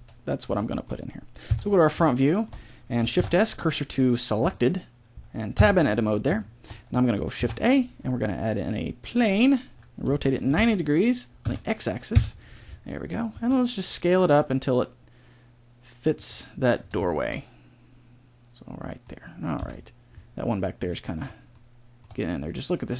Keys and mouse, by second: 0.5 middle click, 1.4 KP_1, 3.1 shift+s, 5.5 Tab, 7.3 shift+a, 10.0 r, 13.3 s, 19.5 KP_1, 20.8 middle click.